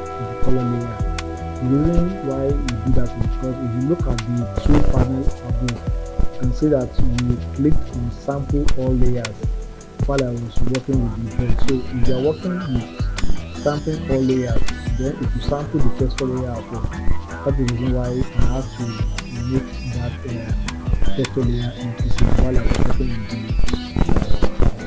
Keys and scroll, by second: 7.9 s.